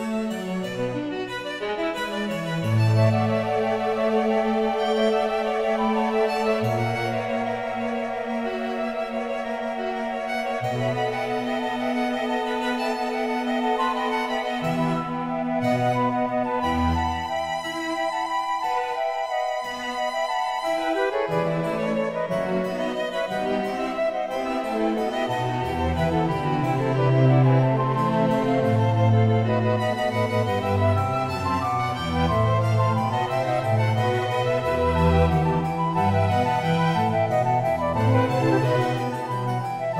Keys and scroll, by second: 0.0 Return, 32.3 ctrl+j.